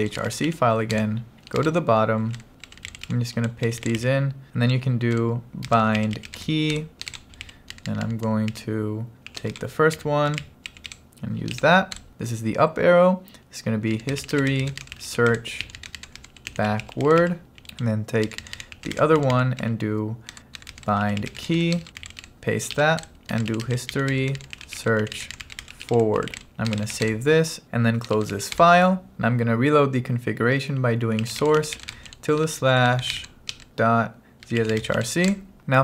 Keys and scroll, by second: 0.0-1.0 typing, 1.1 Return, 2.1-12.0 typing, 5.2 Return, 13.7-28.8 typing, 20.4 Return, 31.0-35.5 typing, 35.6 Down.